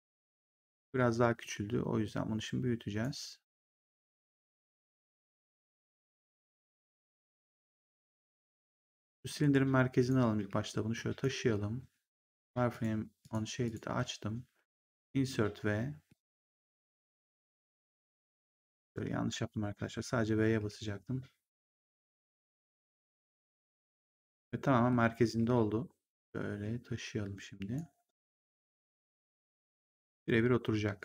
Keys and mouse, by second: 1.2 w, 2.0 click, 4.1 r, 6.9 click, 7.4 ctrl+1, 9.3 ctrl+1, 9.9 click, 10.3 w, 10.9 click, 12.6 click, 14.8 Insert, 15.2 v, 16.0 middle click, 16.9 r, 18.8 ctrl+z, 22.9 click, 23.2 v, 24.0 middle click, 26.1 click.